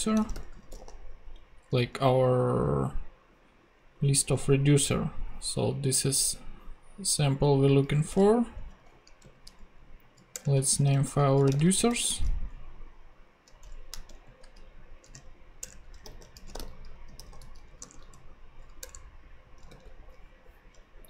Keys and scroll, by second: 0.1-1.3 typing, 8.1 super+Tab, 9.2 super+n, 10.6 Return, 10.6-12.4 typing, 13.6 Escape, 14.1 super+n, 15.0 super+f, 15.1-17.0 typing, 15.6 Return, 17.8 Return, 19.6 super+Return, 19.7 super+v.